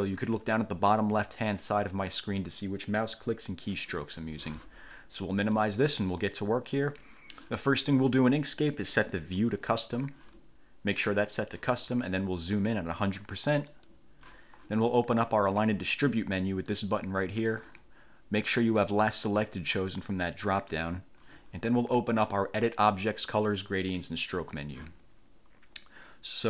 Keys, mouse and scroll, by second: 5.7 click, 6.4 click, 9.4 click, 13.9 click, 16.9 click, 18.8 click, 20.9 click, 24.5 click.